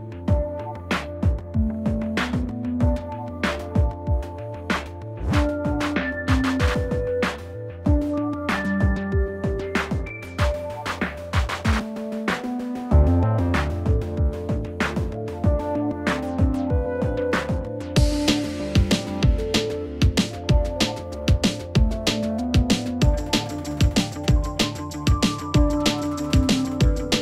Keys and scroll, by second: 9.7 Up.